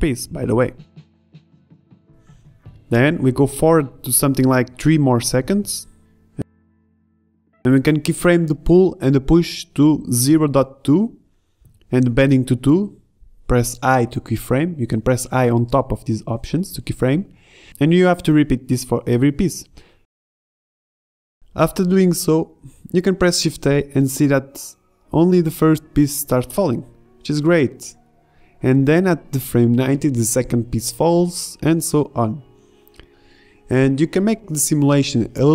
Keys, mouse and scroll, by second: 1.7 i, 1.7 i, 11.3 i, 12.3 i, 13.5 i, 14.6 click, 15.2-16.2 drag, 16.6-22.3 typing, 22.3 shift+Left, 24.4 alt+a, 28.3-29.2 middle drag, 29.3-30.1 middle drag, 32.9 alt+a, 33.9 shift+Left.